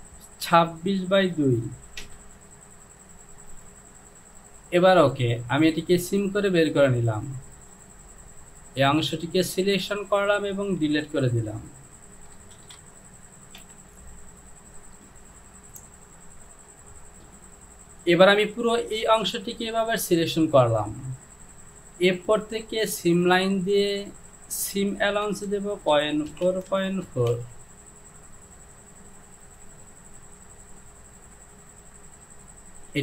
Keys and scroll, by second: 2.0 Return, 11.0 Delete, 12.6 shift+a, 13.7 j, 25.5 Down, 26.0 KP_Decimal, 26.4 KP_4, 26.5 Down, 26.7 KP_Decimal, 27.1 KP_4, 27.3 Down.